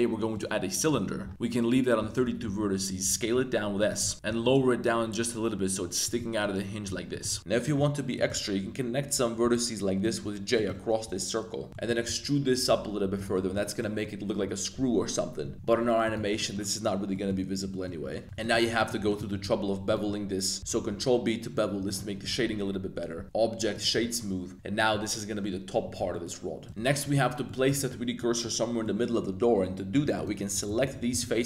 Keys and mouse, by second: 2.0 Tab, 2.4 s, 3.8 click, 4.1 Tab, 4.2 g, 4.5 z, 6.0 click, 6.2 middle click, 7.1 middle click, 7.3 Tab, 7.5 click, 8.1 shift+click, 9.4 j, 10.5 shift+click, 11.0 j, 11.7 middle click, 11.7 3, 12.0 e, 13.1 click, 13.4 Tab, 13.7 middle drag, 15.4 Tab, 15.5 g, 16.0 click, 16.0 z, 16.2 z, 16.3 Tab, 16.4 middle click, 17.1 middle drag, 17.7 middle click, 18.2 2, 18.5 click, 19.0 alt+shift+click, 19.4 shift+g, 20.1 z, 20.6 super+b, 21.8 click, 22.5 Tab, 22.9 Tab, 23.1 1, 23.2 Tab, 23.2-23.8 drag, 24.0 middle click, 24.9 a, 26.1 middle click, 26.6 click, 26.7 3, 27.0 alt+click, 27.4 middle click, 28.1 middle click, 28.1 z, 28.8 middle click, 30.1 alt+click, 30.6 a, 30.8 a, 30.9 a, 31.1 b.